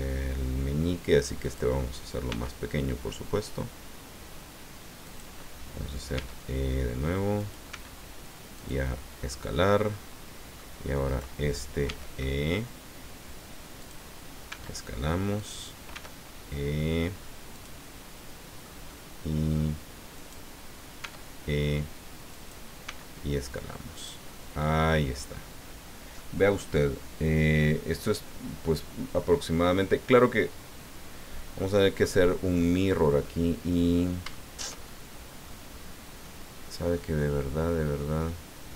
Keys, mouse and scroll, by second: 1.4 click, 2.3 s, 5.0 click, 6.1 e, 7.4 click, 7.7 s, 8.5-10.8 drag, 8.9-10.8 middle drag, 11.1 right click, 11.8 e, 13.8 click, 14.5 s, 15.4 click, 15.9 e, 17.5-18.8 drag, 17.8-18.8 middle drag, 20.2 right click, 21.0 e, 22.3 click, 22.8 s, 23.9 click, 24.3 middle click, 25.2-25.5 scroll down 1, 26.2-30.3 middle drag, 32.8-33.9 drag, 33.9 scroll up 2, 34.3 shift+click, 35.2 click, 35.7-36.2 scroll up 2, 36.2 click, 37.2 click.